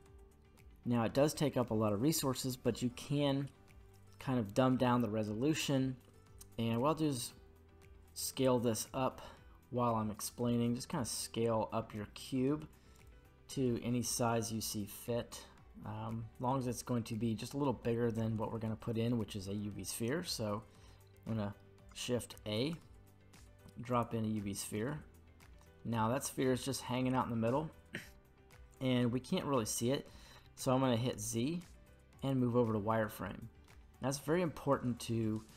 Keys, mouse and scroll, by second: 5.3 middle click, 7.0 s, 12.9 click, 14.7 middle click, 15.2-15.6 scroll down 2, 15.6-17.6 middle drag, 22.7 shift+a, 24.8-27.5 middle drag, 31.1 z, 33.6-34.6 middle drag, 34.9-35.5 scroll up 2.